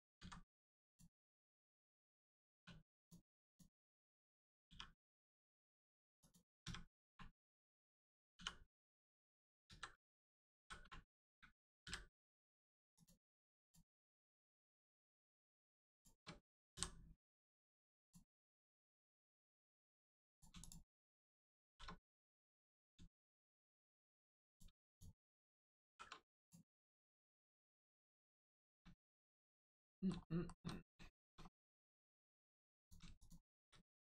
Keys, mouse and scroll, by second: 0.1 x, 0.9 click, 2.4 2, 2.9 click, 3.4 alt+click, 4.6 click, 5.0 middle click, 5.5 Tab, 6.1 click, 7.0 1, 8.9 right click, 9.6 ctrl+z, 10.5 z, 12.9 click, 14.0-14.3 scroll down 1, 14.4 middle click, 15.9 shift+click, 18.0 click, 18.6 middle click, 20.3 click, 20.5 shift+click, 21.6 shift+r, 22.1 middle click, 22.6 scroll up 1, 23.0 shift+middle click, 23.3 middle click, 23.3 middle click, 23.7 scroll up 1, 24.4 click, 24.8 shift+click, 25.8 shift+r, 26.3 click, 26.7 middle click, 28.5 shift+middle click, 29.4 middle click, 29.4 scroll down 1, 29.7 middle click, 30.2 shift+middle click, 30.6 middle click, 31.0 shift+middle click, 31.2 scroll up 1, 31.9 middle click, 32.7 click, 33.1 shift+click.